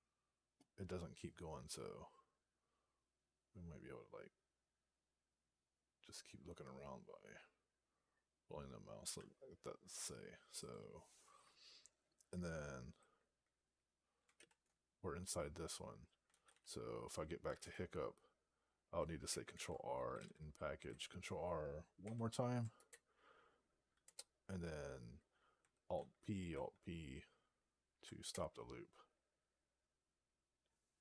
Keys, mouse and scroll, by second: 10.5 click, 14.7 alt+<, 17.5 Return, 20.6 n, 22.4 ctrl+r, 24.4 Return, 26.3 alt+p, 28.1 Return.